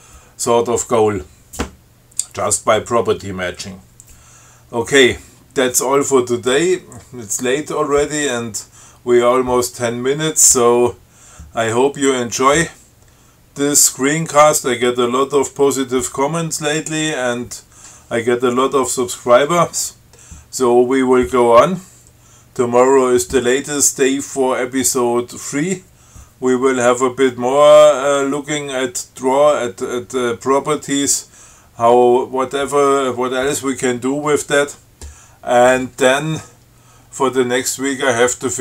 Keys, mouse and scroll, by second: 37.4 scroll up 2.